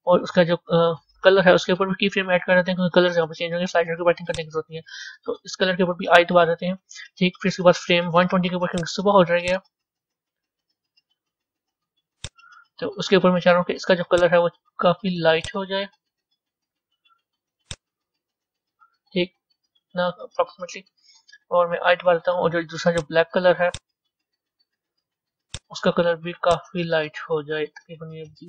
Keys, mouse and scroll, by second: 2.1 i, 4.3-4.7 drag, 5.3 i, 8.7 click, 9.5-12.7 drag, 15.3 click, 22.8 click, 23.7 click, 26.4 click.